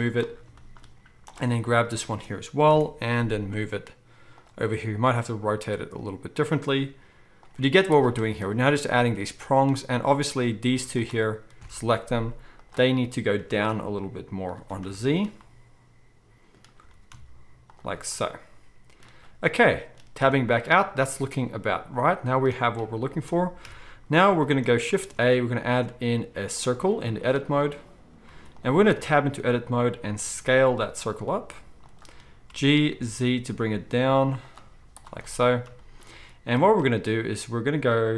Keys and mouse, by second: 1.3 drag, 2.7 ctrl+l, 3.5 g, 4.7 r, 6.9 g, 7.5 z, 11.0 z, 11.6 ctrl+l, 12.0 z, 13.3 g, 13.7 middle click, 14.7-21.2 shift+middle drag, 16.9 g, 20.2 Tab, 23.6 KP_1, 24.3-24.6 shift+drag, 24.9 shift+click, 25.0 shift+a, 28.3 z, 28.9 Tab, 30.2 s, 32.4 g, 34.7 z.